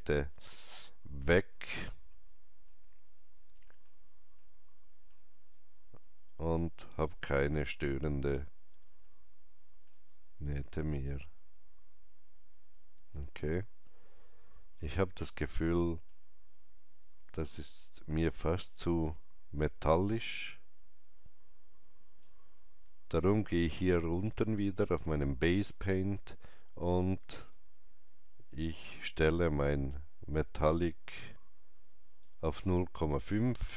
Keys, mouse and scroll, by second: 0.1 click, 2.6 alt+middle click, 5.4-10.0 drag, 7.2 alt+right click, 9.0 alt+middle click, 10.0-23.9 alt+drag, 15.3 alt+middle click, 18.2 shift+right click, 27.3 click, 27.3 shift+right click, 27.3 scroll down 1, 29.5-33.7 drag.